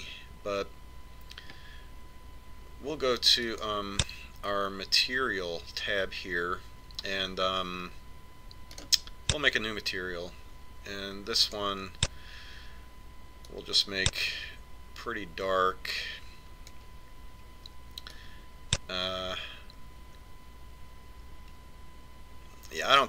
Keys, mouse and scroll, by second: 3.9 click, 9.2 click, 12.0 click, 13.7 click, 18.7 click.